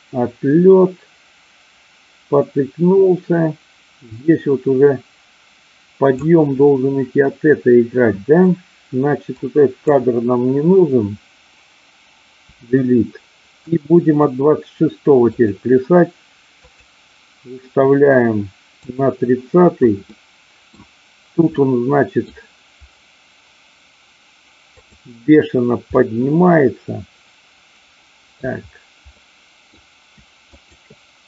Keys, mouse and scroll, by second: 9.3-9.9 drag, 12.4 Delete, 13.7 click, 15.2 click, 16.7 click, 18.8 click, 20.2 middle click, 21.5-22.4 middle drag, 24.8-25.7 drag, 25.9-28.4 middle drag, 29.2-29.7 middle drag, 30.5-31.2 shift+drag.